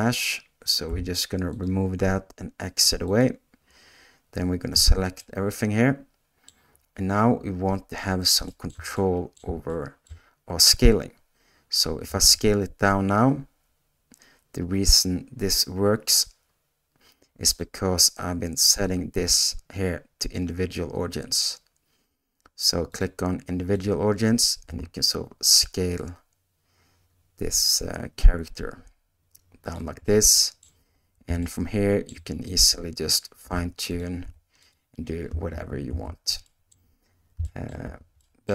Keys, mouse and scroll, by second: 0.9 g, 2.7 x, 4.7 a, 5.2-6.4 middle drag, 8.4 shift+middle click, 8.9 middle click, 9.7 shift+middle click, 12.0 s, 24.6 s, 30.0 scroll up 1, 30.1 middle click, 31.4 shift+click, 32.0 shift+middle click, 33.4 g, 34.2 r, 35.6 ctrl+z, 36.0 ctrl+z, 36.4 middle click, 37.4 shift+middle click, 37.8 a, 38.2 middle click.